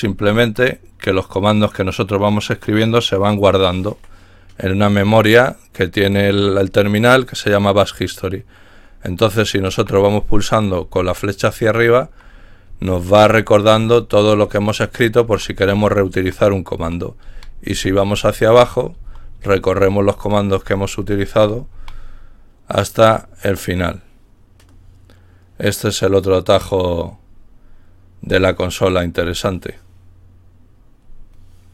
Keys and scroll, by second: 9.6 Up, 10.8 Up, 11.6 Up, 12.0 Up, 12.7 Up, 13.1 Up, 13.7 Up, 14.3 Up, 14.8 Up, 15.0-21.7 typing.